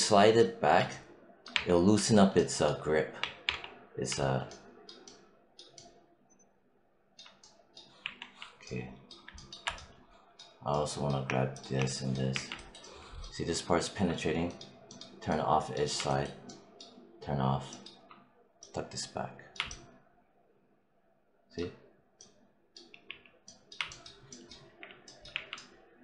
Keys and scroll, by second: 1.4 3, 3.1 1, 7.9 4, 12.2 5, 22.9 z, 24.5 5, 25.2 4.